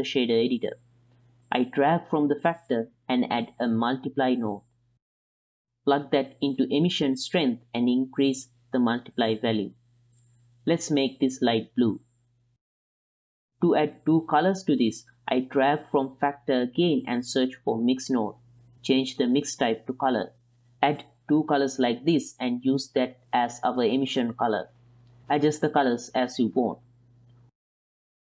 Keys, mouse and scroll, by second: 1.6-2.0 drag, 2.5 click, 3.0 click, 3.6-5.4 drag, 5.8 click, 6.9 click, 7.5 click, 9.1 ctrl+shift+click, 10.1 ctrl+shift+click, 10.9 ctrl+click, 11.2-11.7 drag, 11.2-11.7 middle drag, 12.1 click, 13.5 click, 14.2 x, 14.4 click, 14.6-17.9 drag, 18.4-19.4 drag, 19.9 click, 20.5 ctrl+c, 20.9 ctrl+v, 21.4 ctrl+v, 23.7 click, 24.4-24.7 drag, 25.6 click, 27.1-27.9 middle drag.